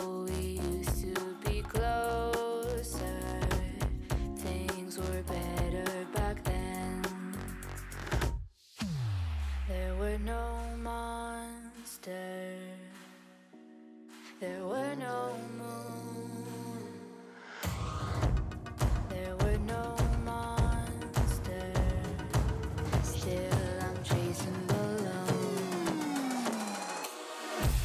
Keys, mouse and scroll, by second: 0.4 3, 0.8 click, 1.3 shift+click, 1.8 x, 3.8 middle click, 4.1 alt+z, 4.5 middle click, 4.8-5.5 scroll down 8, 5.5 Tab, 6.2 shift+click, 6.8 ctrl+p, 8.2 ctrl+j, 9.1-9.8 middle drag, 9.8 click, 10.1 Tab, 10.5-10.8 scroll down 4, 10.8 scroll up 3, 11.0 ctrl+z, 11.4 ctrl+z, 11.7 ctrl+z, 12.3 click, 13.2 shift+c, 13.5 middle click, 13.8 scroll up 3, 14.0-15.4 right drag, 15.4 shift+click, 15.9 ctrl+j, 16.9 click, 17.9 click, 18.1 Tab, 18.4 KP_1, 18.6 KP_3, 19.0 shift+middle click, 19.2-20.3 scroll up 6, 19.4 shift+middle click, 20.3 l, 21.0 shift+d, 24.9 g.